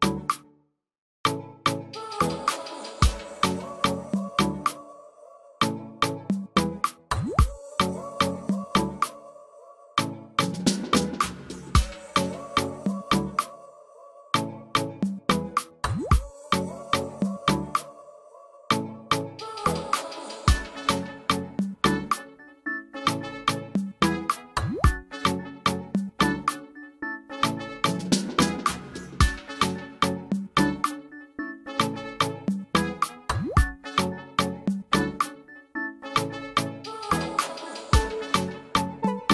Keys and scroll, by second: 2.3 ctrl+f, 2.6 ctrl+alt+space, 19.1 ctrl+alt+space, 25.4 ctrl+space, 27.5 ctrl+alt+space, 29.4 typing.